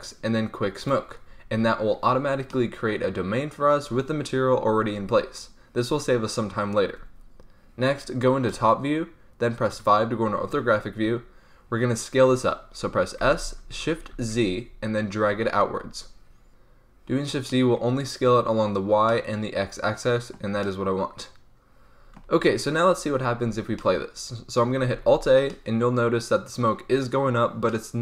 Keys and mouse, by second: 0.9-2.4 middle drag, 5.9-11.6 middle drag, 8.4 KP_7, 9.7 KP_5, 13.1 s, 17.4 click, 22.4-24.9 middle drag, 24.9 alt+a.